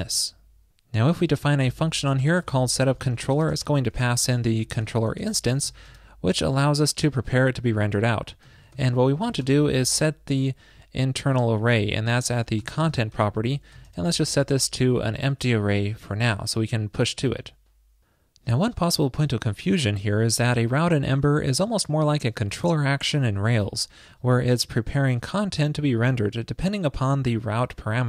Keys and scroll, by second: 17.3 super+s.